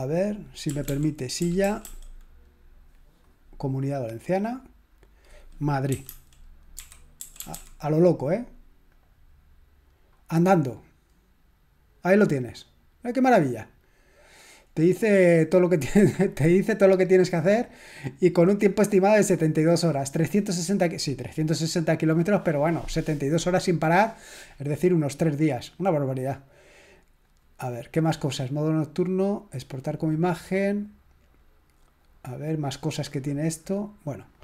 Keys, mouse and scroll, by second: 0.4-2.3 typing, 4.3 click, 5.6-8.0 typing, 8.9 click, 15.2-16.8 scroll up 2, 27.2 click, 32.0 click, 32.4 click, 34.3 click.